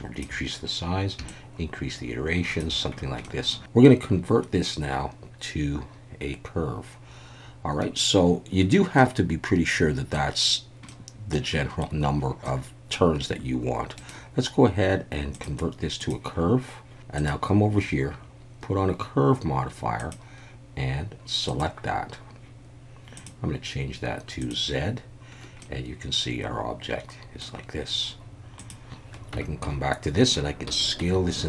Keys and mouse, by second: 1.3-2.7 shift+drag, 3.8 middle click, 8.9-10.1 middle drag, 10.9-11.3 middle drag, 12.4-12.9 middle drag, 14.1-17.2 right drag, 20.1-21.6 drag, 23.2-24.5 drag, 25.6-27.4 middle drag, 28.6 click, 29.3 Tab, 29.6 a, 30.7 s, 31.0 z.